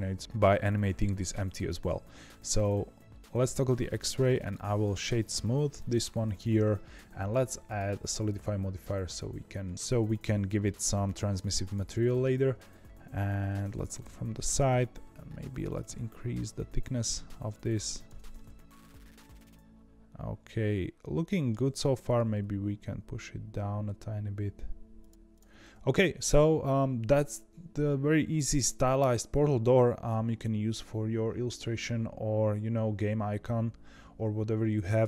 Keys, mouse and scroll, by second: 2.0 z, 3.8 click, 4.3-7.4 right drag, 7.6-12.3 drag, 13.9 KP_3, 15.3-18.3 shift+drag, 18.3-21.3 middle drag, 22.1 g, 25.1-26.0 scroll down 2, 25.2 click, 26.0-26.7 scroll up 1, 26.7-28.9 scroll up 1.